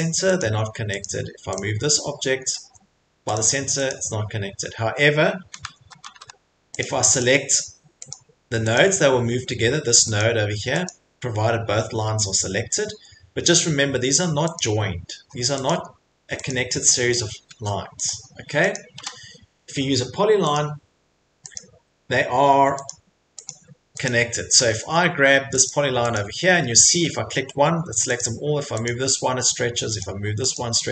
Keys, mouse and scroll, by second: 0.4 click, 0.5 Escape, 1.0 click, 1.6 click, 2.6 Escape, 3.3 click, 3.9 click, 4.0 Escape, 5.7 ctrl+z, 6.0 ctrl+z, 6.8 click, 7.2 click, 8.1 click, 8.7 click, 10.2 click, 10.9 click, 12.5 Escape, 14.6 click, 15.2 Escape, 15.7 click, 16.5 click, 16.9 Escape, 17.1 middle click, 17.2 middle click, 17.5 middle click, 18.1 click, 18.1 middle click, 18.7 click, 19.0 Delete, 19.0 middle click, 19.1 middle click, 20.5 click, 21.6 click, 22.9 click, 23.5 click, 24.0 click, 24.5 Escape, 24.8 Escape, 25.7 click, 26.1 click, 28.2 click, 28.9 click, 30.0 click, 30.5 click.